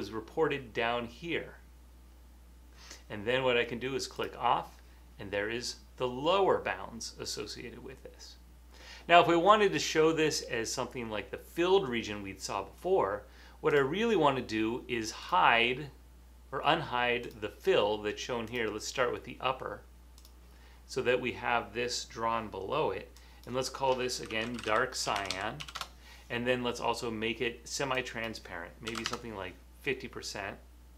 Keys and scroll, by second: 24.2-26.1 typing, 27.3 typing, 28.8-29.7 typing.